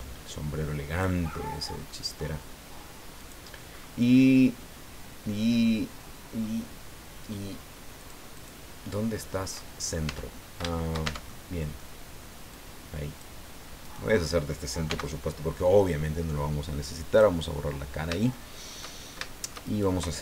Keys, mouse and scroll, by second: 1.3-1.7 scroll up 1, 1.7 middle click, 3.1 click, 3.7 scroll up 1, 4.1-6.6 middle drag, 8.0 click, 8.4 click, 9.2 middle click, 10.1 Tab, 10.3 scroll down 1, 10.7 shift+middle click, 11.1 shift+Tab, 11.3 shift+middle click, 12.5 click, 13.8 right click, 14.9 x, 17.1 click, 17.8 middle click, 18.3 shift+middle click, 19.0 shift+scroll down 1, 19.3 shift+middle click, 19.7 shift+right click.